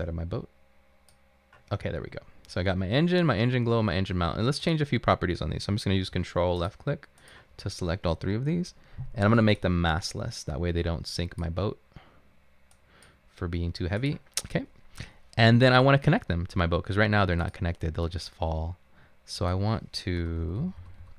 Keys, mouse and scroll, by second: 0.0-0.3 typing, 2.1 typing, 20.3-21.0 typing.